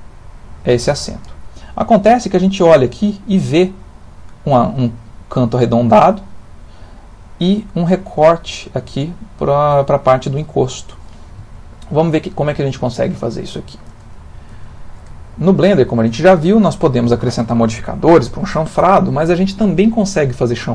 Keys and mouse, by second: 11.5 ctrl+middle click, 12.7 ctrl+middle click, 13.2 shift+middle click, 14.1 ctrl+middle click, 14.7 shift+middle click, 15.1 ctrl+middle click, 18.5 middle click.